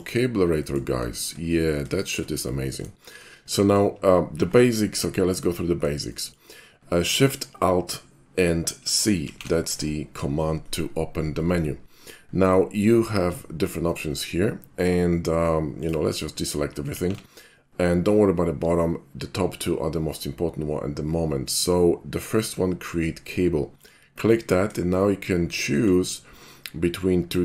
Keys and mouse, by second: 0.0 shift+d, 0.0 drag, 0.6 middle click, 1.1 shift+middle click, 1.5 shift+middle click, 2.0 shift+middle click, 2.8-3.1 shift+middle drag, 3.5 shift+middle click, 6.1 shift+middle click, 9.3 alt+shift+c, 15.8 click, 17.0 alt+shift+c, 23.8 click, 25.0-25.9 shift+middle drag.